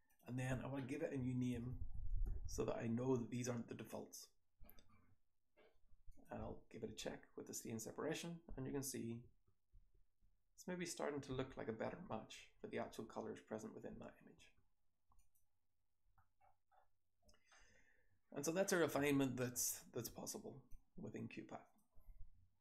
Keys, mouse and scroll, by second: 6.1 click, 6.4 2, 6.9 3, 8.0-8.5 scroll down 2, 8.5 scroll down 1, 8.5 2, 9.2 1, 9.8-11.4 scroll down 3, 9.8 2, 10.3 3, 11.4-12.0 scroll down 1, 11.4 2, 11.9 3, 12.4 4, 12.9-14.0 scroll down 1, 12.9 3, 14.0-15.1 scroll down 1, 14.0 2, 14.3 1, 15.1 click, 15.1-16.0 scroll down 1, 16.0-17.5 scroll down 1, 16.0 BackSpace, 17.5-20.6 scroll up 1, 20.6-21.7 drag, 20.6-22.6 scroll up 1.